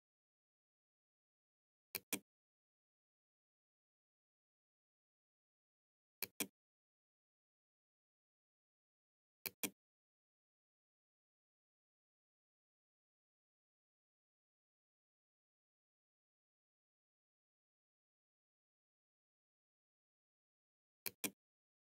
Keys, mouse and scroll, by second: 1.0 click, 5.3 click, 8.5 click, 16.7 Tab, 20.1 click.